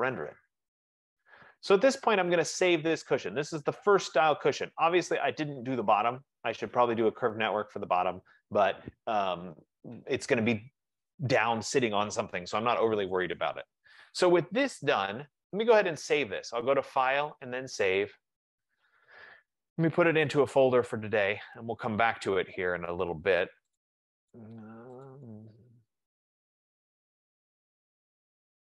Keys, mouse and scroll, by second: 7.6 right click, 16.6 click, 18.1 click, 20.6 click, 23.8 click, 24.1 click, 25.2 click, 25.3 click, 26.9 click, 27.0 click, 28.0 click.